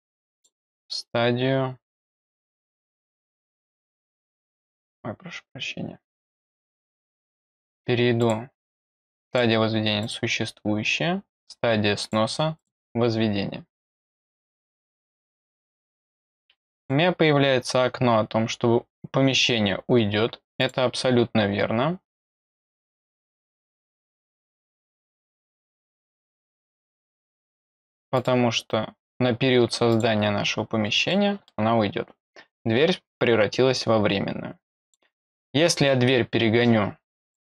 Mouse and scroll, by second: 0.3 click, 1.2 scroll down 2, 1.9 click, 2.8 click, 3.2 click, 4.8 click, 7.3 click, 8.2 click, 9.2 click, 10.0 click, 12.0 click, 12.5 click, 14.0 click, 15.4 click, 16.7 click, 17.9 middle click, 17.9 scroll down 2, 20.6 click, 22.8 click, 23.4 click, 24.6 click, 26.1 click, 26.9 click, 27.6 click, 28.1 click, 29.9 click, 30.5 scroll down 1, 31.1 middle click, 34.8 click, 37.2 click.